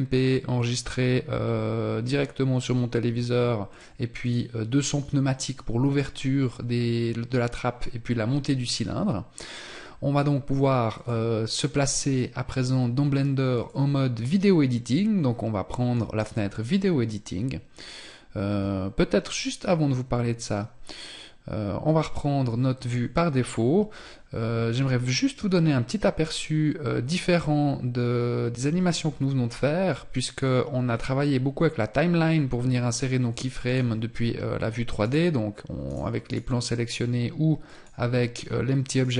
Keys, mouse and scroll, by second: 32.7 click, 34.0 right click, 36.6 click, 38.0 right click.